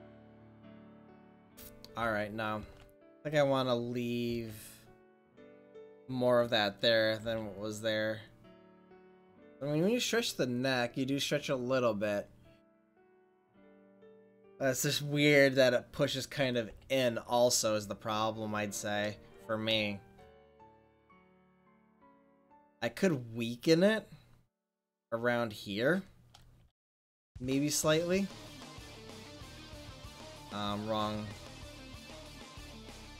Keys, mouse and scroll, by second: 1.7 ctrl+z, 2.3 ctrl+z, 2.9 ctrl+z, 4.6 ctrl+z, 5.3 ctrl+z, 7.2 r, 17.4 middle click, 17.6 click, 18.0 middle click, 20.9-21.5 drag, 26.6 f, 27.5-29.7 drag, 29.7 ctrl+z.